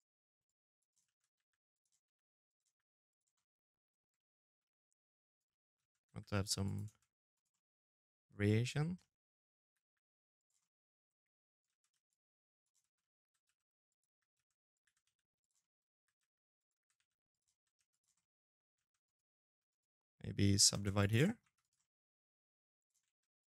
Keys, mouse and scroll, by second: 0.0-1.4 typing, 2.1 middle click, 2.9 shift+middle click, 3.4 middle click, 4.1 right click, 4.2 middle click, 4.5 shift+z, 4.8 g, 5.6 shift+z, 6.1 right click, 6.3 middle click, 8.4 g, 9.4 middle click, 10.2 right click, 10.4-13.6 typing, 11.7 middle click, 14.3 middle click, 14.7 g, 15.5 g, 16.3 r, 16.9 middle click, 17.5 shift+z, 17.8 right click, 18.2 2, 18.3-18.9 scroll up 3, 18.4 right click, 19.4 shift+z, 19.6 w, 20.0 middle click, 20.2 1, 20.4 right click, 20.5 middle click, 21.0 e, 21.8 ctrl+a, 22.4 middle click, 22.8 e.